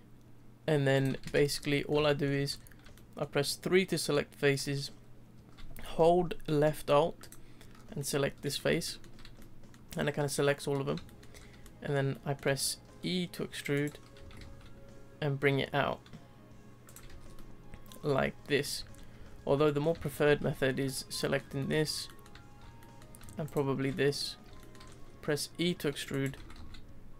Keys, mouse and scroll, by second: 1.2 3, 1.7-2.5 shift+middle drag, 2.5-2.9 scroll up 3, 2.9-6.1 shift+middle drag, 7.2 alt+click, 8.0-11.4 middle drag, 11.4 scroll up 1, 11.6-12.8 middle drag, 12.8 e, 14.1 s, 17.1 Tab, 17.2 scroll down 1, 17.3-18.8 middle drag, 18.8 ctrl+z, 18.9 scroll down 1, 19.2 ctrl+z, 19.6-20.4 middle drag, 20.4 3, 20.8 alt+click, 21.2-23.4 middle drag, 23.4 alt+shift+click, 23.9-24.9 middle drag, 24.9-25.7 scroll up 1, 25.7 e, 26.3 s.